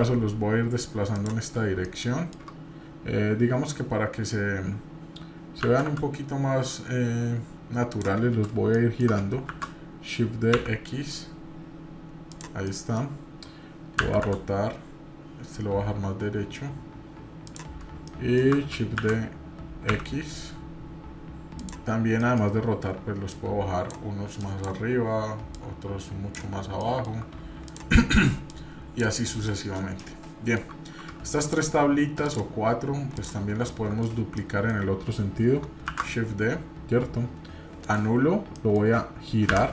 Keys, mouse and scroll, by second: 1.8-2.4 shift+middle drag, 8.7 shift+middle click, 9.5 shift+d, 12.7 middle click, 14.0 r, 18.1 shift+middle click, 19.0 shift+d, 22.2 middle drag, 23.3-23.9 drag, 24.4 click, 25.5 click, 26.7 shift+middle click, 27.6 click, 28.4 click, 29.2 scroll down 2, 29.5 middle click, 30.0 middle click, 31.4-32.0 shift+drag, 32.2-33.6 shift+drag, 33.7-34.1 shift+middle drag, 34.3 scroll down 1, 34.3-34.7 middle drag, 35.9 shift+d, 38.5 middle click, 39.5 r.